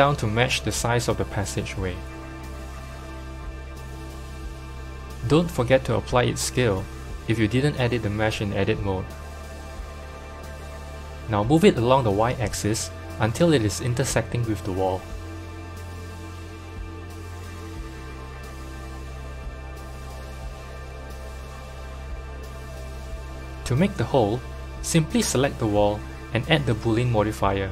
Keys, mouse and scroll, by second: 0.2 g, 1.5-1.9 scroll up 4, 1.9 g, 5.2 Tab, 5.2 click, 5.6 g, 7.8 Tab, 8.9 ctrl+a, 10.4 KP_7, 10.9-11.8 scroll down 9, 11.8-13.7 scroll down 1, 11.8 g, 13.7-14.1 shift+middle drag, 14.1-15.3 scroll up 6, 15.3-16.0 shift+middle drag, 16.0 Tab, 16.6 click, 17.7 s, 20.9 Tab, 25.3 click, 26.2-27.7 drag.